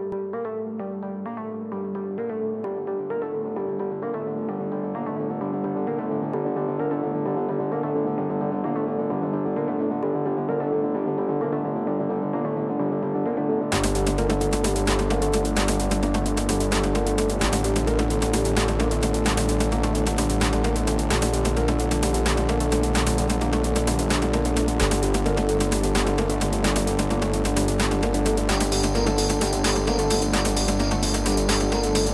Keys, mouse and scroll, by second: 5.3 click, 9.3-24.7 drag, 26.7-32.1 drag.